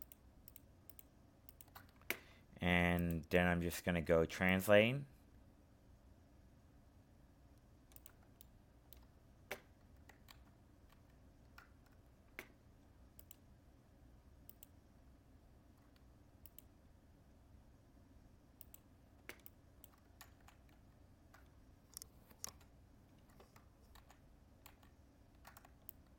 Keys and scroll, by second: 10.2 ctrl+z, 20.2 ctrl+alt+z, 23.9 ctrl+z.